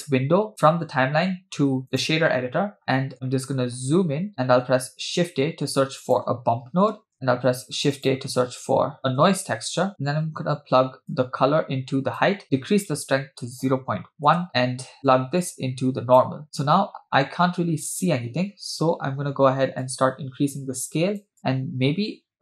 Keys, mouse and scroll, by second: 2.0 click, 2.8 middle click, 3.7-4.3 scroll up 7, 4.3-4.6 middle drag, 4.3 click, 4.3-4.6 scroll down 4, 5.2 shift+a, 7.5 shift+a, 11.1-12.3 drag, 12.4-14.5 drag, 15.1 click, 16.4 click, 16.4 scroll up 3, 17.1 scroll up 4, 17.8-18.2 scroll down 1, 19.8-22.4 drag.